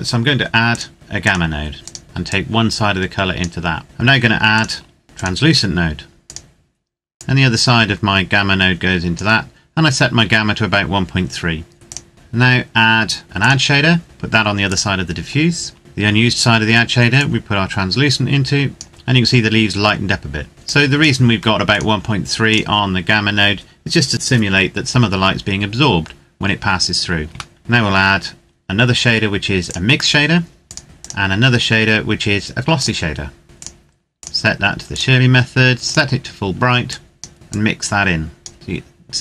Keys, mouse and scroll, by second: 1.2 click, 2.5 click, 3.8 shift+middle click, 4.2 click, 11.7 click, 16.9 click, 20.5 click, 26.5-26.9 scroll down 1, 27.3 shift+middle click, 27.6 click, 29.4 click, 30.8-37.8 scroll up 1, 37.8 click.